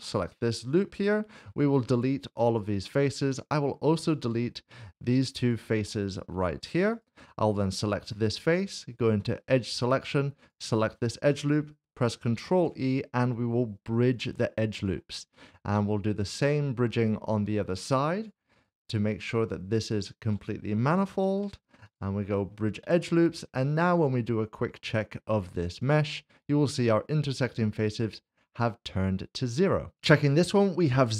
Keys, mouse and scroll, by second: 1.0 x, 2.5 click, 3.5 middle click, 4.3 shift+middle click, 5.4 shift+click, 6.3 x, 6.9 click, 8.0 middle click, 9.9 2, 10.4 ctrl+shift+click, 12.4 ctrl+e, 14.8 click, 15.3 middle click, 17.0 shift+middle click, 18.1 click, 18.5 alt+click, 19.4 alt+s, 19.7 ctrl+shift+click, 21.2 ctrl+e, 21.9 click, 23.3 Tab, 23.5 scroll down 1, 23.8 shift+middle click, 28.1 click, 28.4-28.7 scroll down 1, 28.7 middle click, 29.9 click.